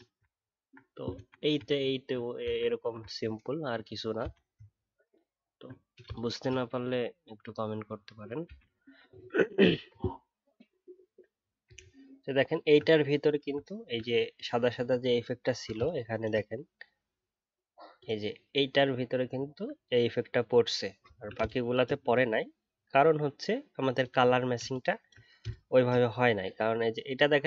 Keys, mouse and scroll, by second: 0.3 alt+scroll up 1, 1.7 alt+scroll up 2, 1.7 alt+scroll down 1, 3.1 alt+scroll up 1, 3.4 alt+scroll down 1, 4.7-5.2 alt+scroll up 3, 5.2-5.5 alt+scroll down 1, 11.7 alt+scroll up 1, 13.6-14.4 alt+scroll down 1, 15.0 alt+scroll up 1, 19.3 alt+scroll up 2, 21.0-21.5 alt+scroll down 1, 22.0 alt+scroll up 2, 22.7 alt+scroll down 1.